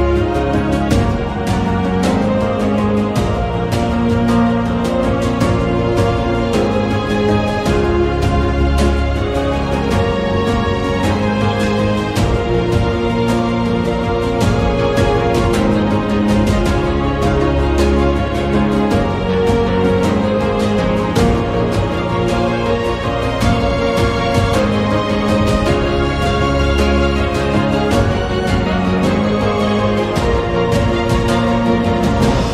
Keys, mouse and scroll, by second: 0.4 shift+d, 1.4 p, 5.2 Tab, 9.8-12.4 shift+drag, 12.7 ctrl+a, 18.2-22.7 right drag, 23.2-24.8 middle drag, 25.3 middle click, 27.3-28.8 drag, 29.9 click, 31.3 middle click.